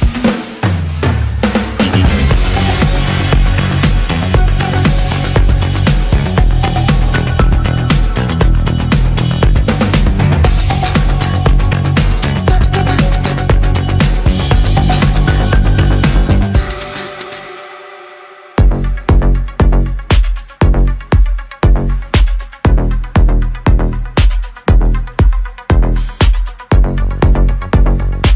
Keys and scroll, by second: 3.0 ctrl+z, 7.1 ctrl+z, 10.7 ctrl+z, 15.5 space, 23.5 space.